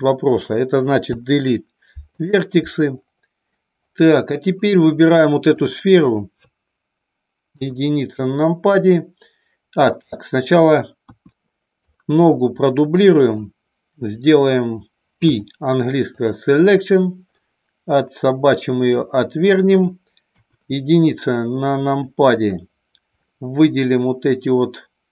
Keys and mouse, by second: 1.1 Delete, 5.5 click, 7.5 KP_1, 9.8 middle click, 11.0 KP_1, 11.9 click, 15.3 p, 17.4-19.9 middle drag, 20.3 KP_1, 21.2 click, 23.2-25.1 middle drag.